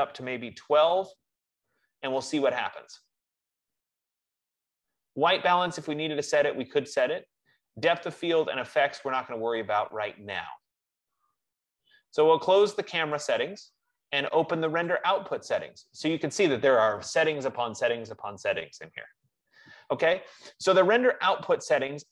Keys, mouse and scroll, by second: 0.4-1.1 typing, 13.4 click, 15.2 click.